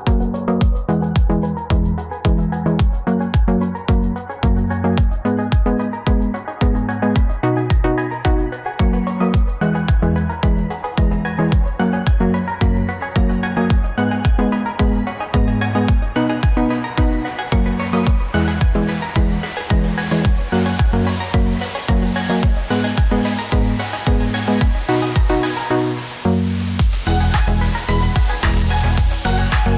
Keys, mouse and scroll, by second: 9.4 ctrl+t, 28.3 Caps_Lock, 29.5-29.7 typing.